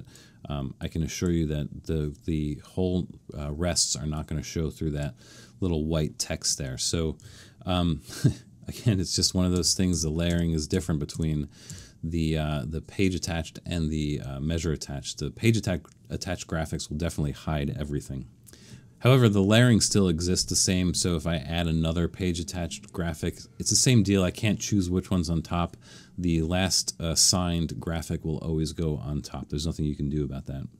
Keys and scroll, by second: 9.1 super+z, 9.5 super+z.